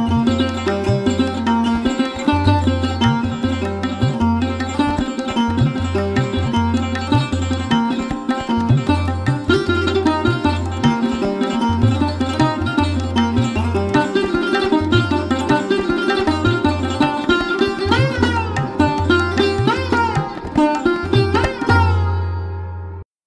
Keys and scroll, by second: 1.8 space, 2.9 space, 6.9 space, 8.3 space, 10.8 space, 15.0 space, 20.3 space, 21.8 space.